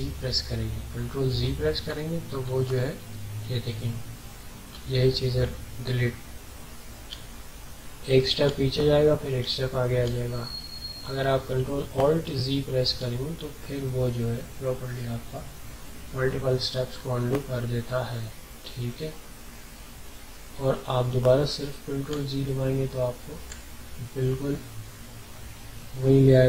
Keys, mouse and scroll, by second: 0.1 ctrl+alt+z, 1.3 ctrl+z, 10.7 ctrl+z, 11.9 ctrl+alt+z, 13.1 ctrl+alt+z, 14.9 ctrl+alt+z, 22.1 ctrl+z.